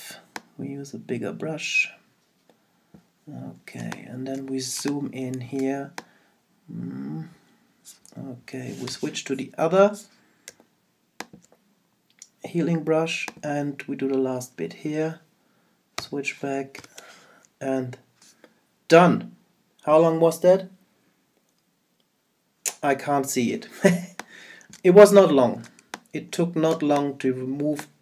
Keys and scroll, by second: 3.8 super+space, 16.8 super+0, 23.9 super+space.